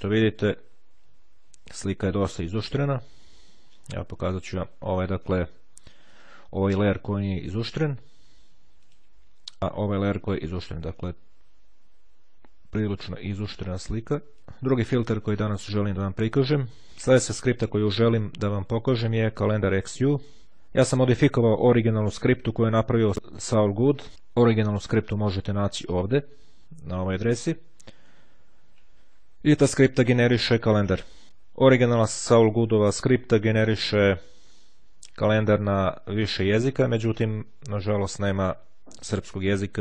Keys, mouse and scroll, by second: 0.1 click, 2.2-3.4 ctrl+scroll up 2, 4.4 click, 6.2 click, 8.9 click, 9.8 click, 12.4-13.1 ctrl+scroll down 2, 14.2 click, 25.2 click, 27.8-29.0 scroll down 2, 29.0-29.7 scroll down 1, 29.8-30.5 scroll down 1, 31.8-32.2 scroll up 1, 33.3-33.9 scroll down 2, 34.3-35.3 scroll down 2, 37.6-38.2 scroll down 1, 38.2-38.8 scroll down 1, 39.0-39.8 scroll down 2.